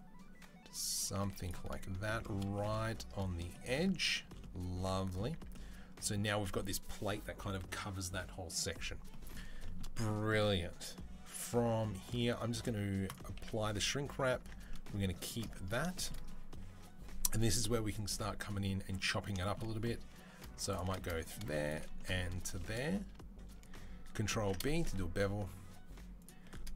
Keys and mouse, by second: 1.1 z, 5.2 Tab, 12.9 click, 13.0 middle click, 13.1-14.2 ctrl+drag, 13.3 ctrl+a, 14.2 Tab, 14.2 middle click, 15.0 shift+click, 15.2 middle click, 15.7 shift+click, 15.9-19.2 middle drag, 19.2 shift+click, 19.4-20.4 middle drag, 20.8-21.9 shift+drag, 22.3 shift+click, 23.7 ctrl+click, 24.2 ctrl+b, 24.5-26.3 shift+drag.